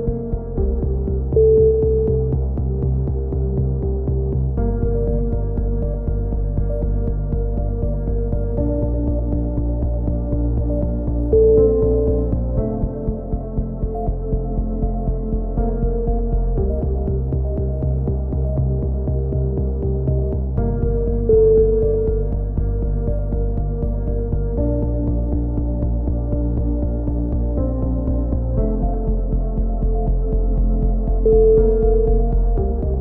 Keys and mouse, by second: 5.5 z, 6.8 click, 7.1 middle click, 7.2-7.6 drag, 8.4-9.8 middle drag, 9.8-10.8 drag, 10.8 KP_3, 10.9 middle click, 11.0 z, 11.2 drag, 12.0-12.8 drag, 12.8-13.2 right drag, 12.8 KP_3, 14.6 z, 14.9 z, 16.5 z, 16.7 z, 17.7 ctrl+z, 17.7-18.6 drag, 18.6 a, 18.8 z, 19.0-19.6 drag, 20.2 KP_3, 20.5 z, 20.7-22.1 drag, 22.1 z, 22.3-23.1 drag, 23.1 z, 23.4 KP_3, 23.9-24.2 drag, 24.4-25.6 drag, 25.6 ctrl+z, 25.8 ctrl+z, 26.1 ctrl+z, 26.6-27.1 drag, 27.7 KP_3, 28.0 z, 28.1-29.0 drag, 29.6 z, 29.8-30.4 drag, 30.7 KP_7, 30.9 z, 31.4 right click, 31.5 KP_3, 32.0 click.